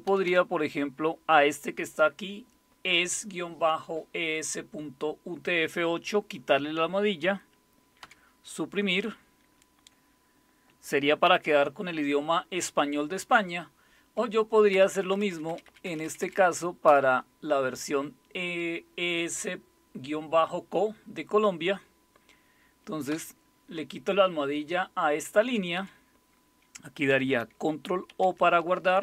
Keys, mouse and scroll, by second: 0.1 Down, 0.3 Down, 8.0 Delete, 11.2 #, 14.7 Up, 14.9 Up, 15.1 Up, 15.3 Up, 15.8 Up, 16.9 Left, 23.1 Delete, 25.4 Down, 25.8 Up, 28.1 ctrl+o.